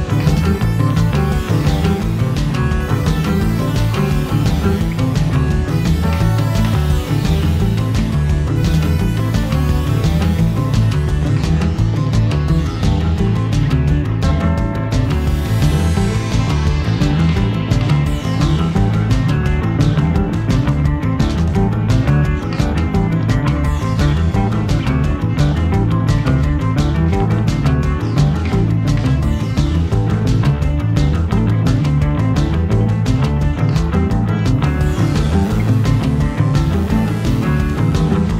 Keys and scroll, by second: 3.7 1, 3.9 ., 4.0 5, 4.2 Return, 14.5 0, 14.6 ., 14.9 7, 15.0 5, 15.3 Return.